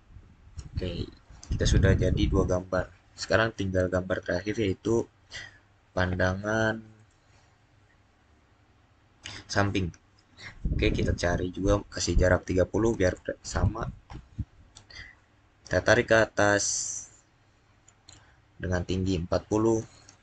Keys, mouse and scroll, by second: 6.8 click, 8.7 click, 12.8-13.4 typing, 13.9 Return, 19.6 Return, 20.0-20.2 typing.